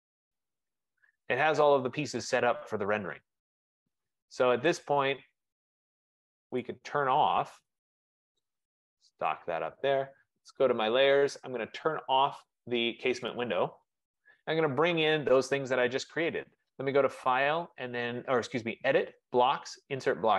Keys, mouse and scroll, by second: 0.4 click, 3.0 click, 4.1 click, 4.9 click, 5.8 click, 6.7 click, 7.5 click, 9.4 click, 10.8 click, 13.5 click, 15.8 click.